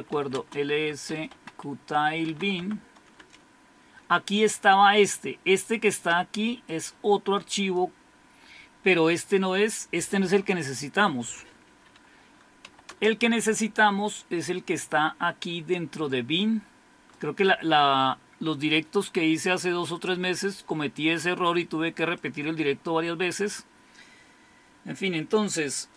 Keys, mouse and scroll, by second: 0.0-2.8 typing, 1.3 Tab, 3.2 Return, 6.7-7.8 drag, 10.3 click, 12.0-13.1 typing, 16.1-17.2 drag, 23.3 click.